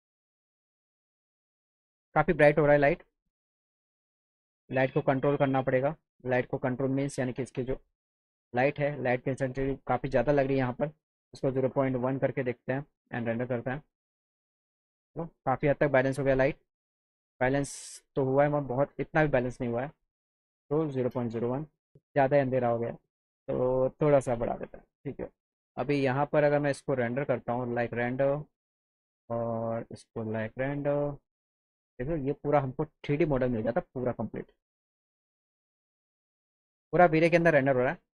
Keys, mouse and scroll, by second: 2.7 click, 3.1 click, 4.6 click, 5.5 click, 6.0 click, 6.7 click, 7.8 click, 9.5 click, 10.2 click, 11.3 KP_0, 11.6 KP_Decimal, 11.8 KP_1, 13.6 click, 16.6 click, 18.1 click, 18.6 click, 19.9 click, 22.8 click, 23.3 click, 27.2 click, 29.2 click, 30.1 click, 31.4 click, 33.8 alt+middle click.